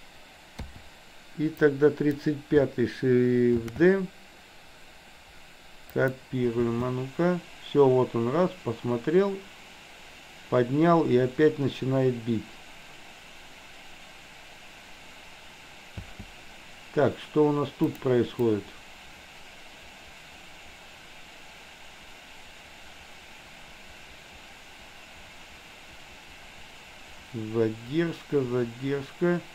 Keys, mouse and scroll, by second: 0.7 i, 1.6-2.2 drag, 3.6 shift+d, 6.7 space, 16.1 space, 18.1 click, 18.6-29.5 drag.